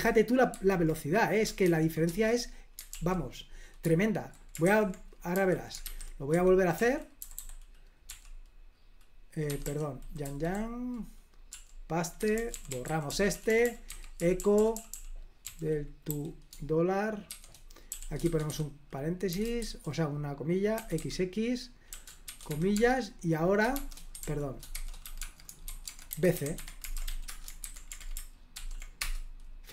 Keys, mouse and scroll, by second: 0.0 super+l, 0.6 super+h, 1.7 ctrl+p, 2.2 Return, 3.0 super+l, 3.9-8.3 typing, 9.5 Escape, 9.7 k, 10.3 y, 10.4 y, 11.6-16.1 typing, 17.3-19.7 typing, 20.8-27.8 typing, 28.6 ctrl+p, 28.9 $, 29.1 Return, 29.6 $.